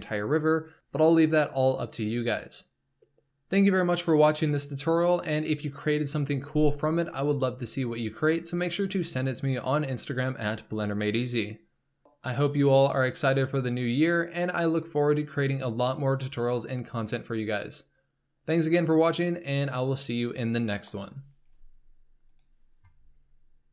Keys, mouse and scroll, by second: 0.0 click, 0.3 scroll down 1, 0.3 shift+middle click, 0.4 scroll up 3, 0.5 shift+middle drag, 0.7-1.2 scroll down 2, 1.2 drag, 1.5-1.9 scroll up 2, 1.7 middle drag, 2.0 g, 2.3 shift+middle click, 2.4 g, 3.1 middle drag, 3.3 KP_0, 3.5 scroll up 1, 3.6 shift+middle click, 4.0 scroll down 2.